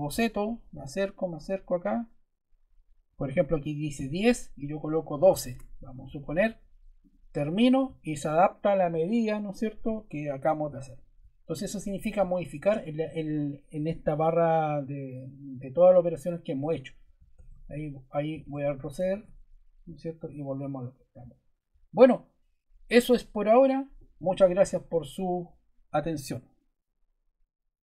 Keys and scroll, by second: 4.8-5.7 typing, 17.1 super+Caps_Lock, 17.2 super+z, 18.4 super+z, 19.1 super+z.